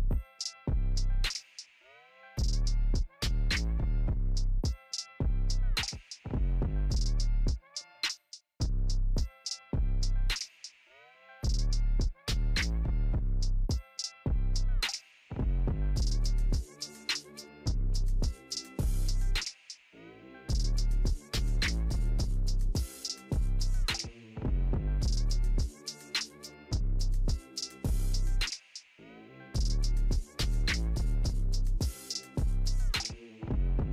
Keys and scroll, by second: 15.2 ctrl+g.